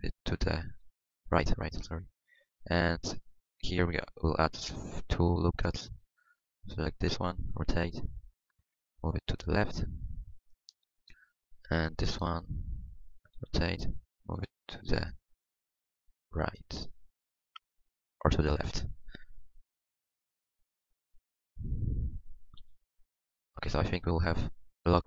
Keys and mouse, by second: 4.4 ctrl+r, 6.6-8.4 drag, 7.5 r, 8.8-10.6 drag, 13.3-14.6 drag, 13.3 r, 16.1-17.1 middle drag, 21.3 middle click, 22.6 g.